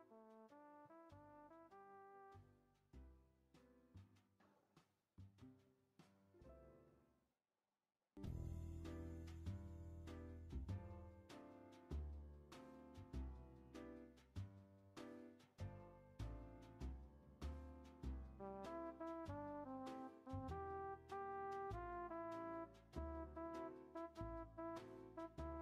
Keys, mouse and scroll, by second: 1.3-2.5 drag, 2.5 scroll up 1, 2.5-4.1 middle drag, 4.1 r, 12.7-16.0 drag, 16.0 space, 18.0 click, 21.4 click, 23.7-24.9 drag.